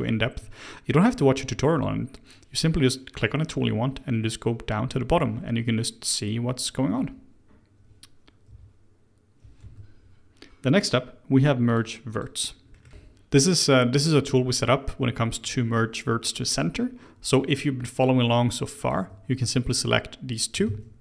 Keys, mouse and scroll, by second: 11.6 click, 12.1 click, 12.7 middle click, 18.8 click, 19.6 shift+click, 20.6 shift+x.